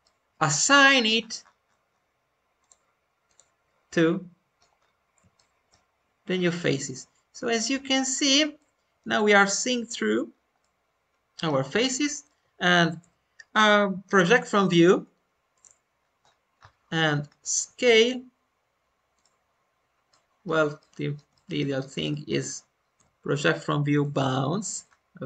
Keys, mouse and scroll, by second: 0.3 u, 0.6 scroll up 2, 2.5-3.9 drag, 2.5-3.2 scroll up 7, 3.9 middle click, 4.7-5.1 scroll up 1, 5.3-8.1 shift+middle drag, 8.1-8.4 scroll up 1, 8.5-10.0 middle drag, 10.2 scroll down 2, 10.5 middle click, 11.7-12.9 alt+middle drag, 12.9 u.